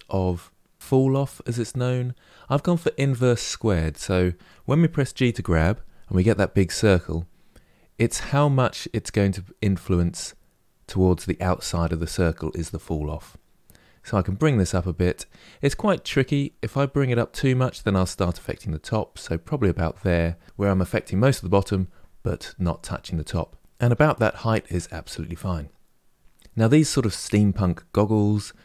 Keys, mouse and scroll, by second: 4.9 g.